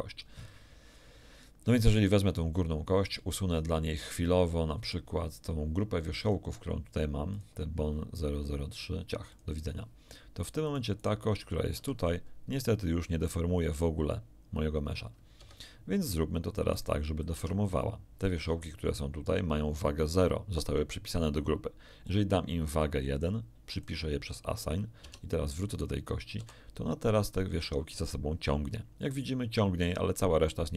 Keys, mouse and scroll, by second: 1.8 right click, 3.0 click, 4.8 right click, 6.2 click, 7.3 click, 9.2 click, 10.6-11.2 right drag, 11.7 r, 15.3 Escape, 16.7 right click, 17.3 Tab, 22.0 click, 23.7 click, 25.0 Tab, 25.6 right click, 26.3 r.